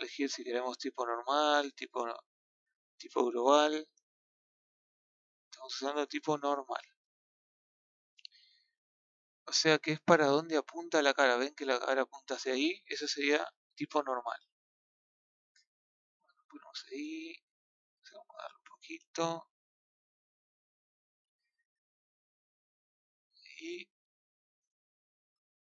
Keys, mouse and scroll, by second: 3.0 click, 4.8 click, 6.4-8.0 drag, 8.0 scroll up 1, 8.9-13.1 shift+middle drag, 13.1 KP_1, 15.4-20.8 drag, 22.9-25.1 scroll down 3, 25.1 scroll down 2, 25.2-25.6 scroll up 5.